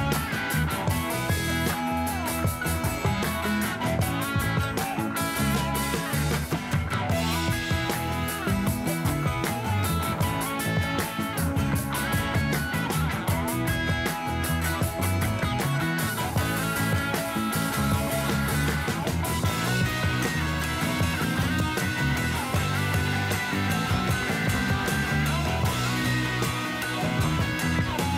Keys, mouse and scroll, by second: 3.0 click, 3.8-5.9 drag, 6.6 click, 7.2-8.5 drag, 9.6 click, 10.3-12.0 drag, 12.6 click, 14.1-16.3 drag, 18.7 click, 19.5 click, 20.9-23.9 drag, 23.9 click, 26.6 click.